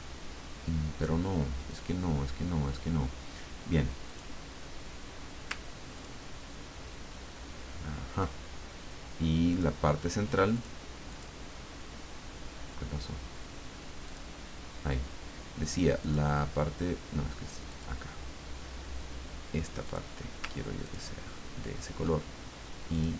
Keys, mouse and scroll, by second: 1.7 click, 4.1 click, 6.0 ctrl+click, 9.5 click, 10.5 click, 11.1 click, 14.0 click, 16.0 click, 17.7 click, 19.8 click, 20.8 ctrl+click, 22.9 click.